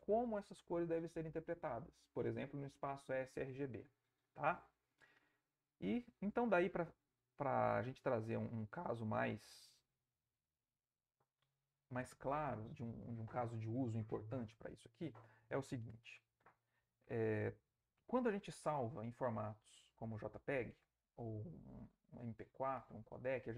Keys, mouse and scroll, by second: 7.0 click, 9.3 click, 10.7 click.